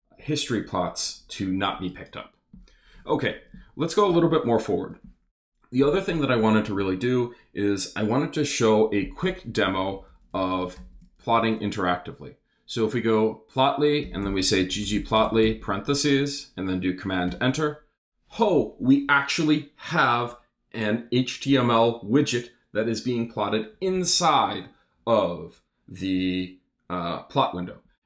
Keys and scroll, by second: 4.1 Return, 9.7-11.7 typing, 13.8-16.1 typing, 16.1 shift+super+0, 17.3 super+Return.